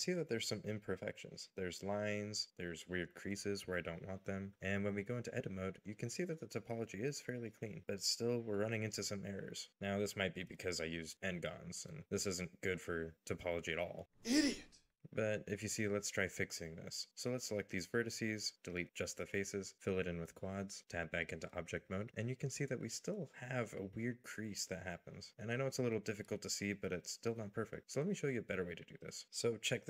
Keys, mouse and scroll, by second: 1.0 scroll up 1, 2.3-3.2 scroll up 1, 4.8-5.5 scroll down 1, 5.5 Tab, 6.1 middle click, 9.2 shift+middle click, 9.7 shift+middle click, 12.9 middle click, 15.0 shift+middle click, 15.5-16.2 scroll up 1, 17.4 alt+click, 20.4 f, 22.1 Tab, 23.4 middle click, 28.6-29.2 scroll down 1, 29.2 middle click.